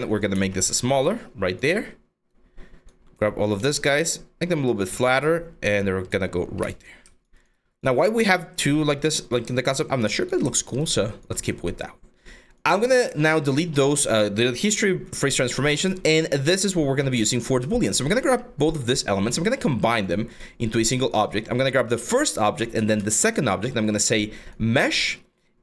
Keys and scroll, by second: 1.5 1, 3.2 r, 4.5 w, 6.0 5, 22.4 q.